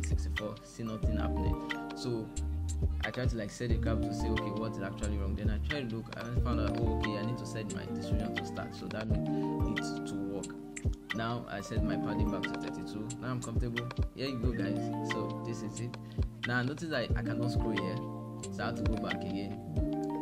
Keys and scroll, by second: 9.1-10.0 typing.